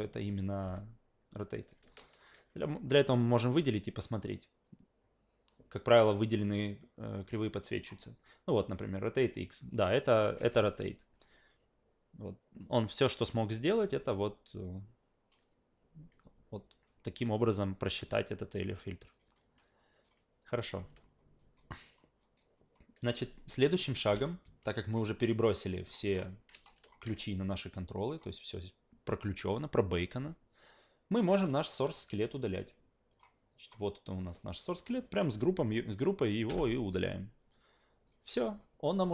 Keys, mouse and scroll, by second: 0.6 f, 1.9 alt+middle click, 4.6-7.8 drag, 9.7 click, 10.2 alt+middle click, 10.4 a, 19.1 click, 19.2 click, 20.0 click, 21.0 alt+middle click, 21.4 alt+right click, 21.8 alt+middle click, 22.2 alt+right click, 22.6 alt+middle click, 24.0 o, 24.7 alt+right click, 25.0 alt+click, 25.5 alt+middle click, 25.8 alt+right click, 25.9 alt+click, 26.3 alt+middle click, 26.6 alt+click, 28.1 click, 31.5 alt+middle click, 31.8 alt+right click, 33.1 click, 33.6 click, 34.4 alt+right click, 34.7 alt+middle click, 35.0 alt+right click, 36.5 Delete, 38.1 click, 38.4 alt+middle click.